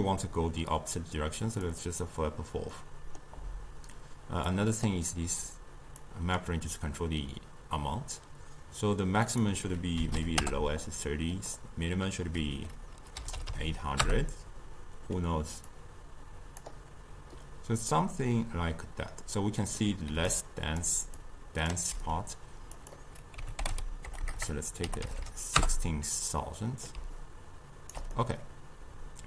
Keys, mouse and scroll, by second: 1.7 click, 2.8-4.5 middle drag, 4.5 click, 6.1 click, 9.3-13.5 drag, 13.5 0, 15.7 drag, 18.0-20.2 middle drag, 20.2 d, 20.3-20.9 drag, 20.9-21.2 d, 21.2-21.8 drag, 21.8 d, 22.8-24.2 drag, 24.2 BackSpace, 24.4 BackSpace, 25.2 0, 27.0 d, 27.2-28.2 right drag, 28.2-29.2 middle drag.